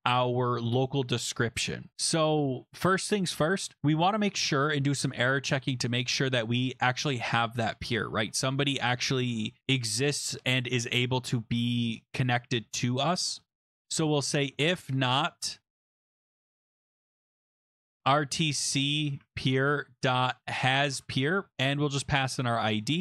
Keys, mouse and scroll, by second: 13.9-23.0 typing, 19.2 Tab.